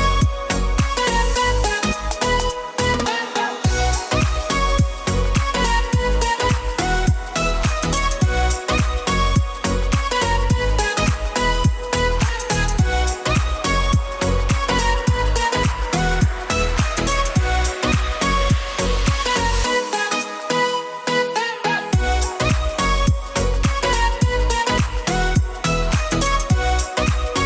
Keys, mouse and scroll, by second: 0.0 click, 0.5 middle click, 0.8-1.5 middle drag, 1.9 s, 2.1 x, 3.2 click, 5.7 s, 6.0 x, 7.3-8.5 middle drag, 8.8 click, 9.4 click, 9.7 click, 11.2 click, 11.9-12.8 middle drag, 13.1 KP_1, 13.8 g, 14.6 click, 14.9 r, 15.6 click, 15.8 h, 16.6 alt+h, 17.0 g, 18.3 click, 18.7-19.5 middle drag, 19.9-20.2 middle drag, 20.5 middle drag, 21.4 shift+middle drag, 21.8 shift+d, 22.5 g, 22.8 y, 23.6 click, 23.8-24.3 middle drag, 24.5 s, 25.4 click, 25.7 KP_1, 26.5 s, 26.7 z.